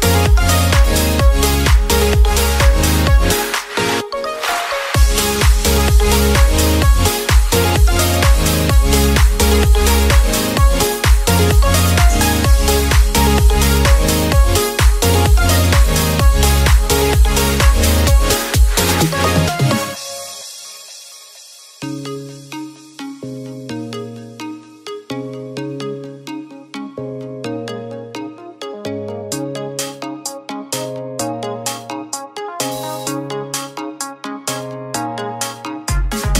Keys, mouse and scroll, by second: 3.5-4.5 middle drag, 4.5 shift+d, 5.4 click, 6.6 p, 7.9-9.8 middle drag, 9.8 click, 10.4-11.0 scroll up 1, 11.0 alt+shift+click, 11.7 alt+shift+click, 12.5 x, 14.7 Tab, 14.9 click, 15.3 Tab, 15.8-17.4 middle drag, 17.4 click, 18.7 click, 19.3 KP_3, 21.2 s, 25.3-26.4 middle drag, 26.4 click, 29.0-30.7 middle drag, 30.7 click, 32.5 click, 33.7 a, 34.5 click.